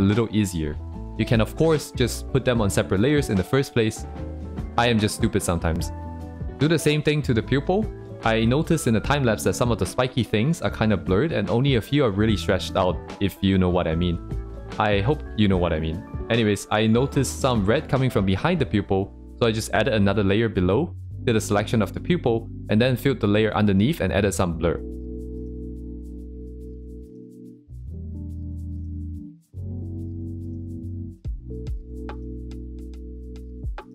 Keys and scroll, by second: 1.3 ctrl+z, 3.0 ctrl+z, 6.2 ctrl+z, 6.8 ctrl+z, 7.9 ctrl+z, 9.9 ctrl+z, 10.9 ctrl+z, 13.4 ctrl+z, 16.5 ctrl+z, 19.5 ctrl+z.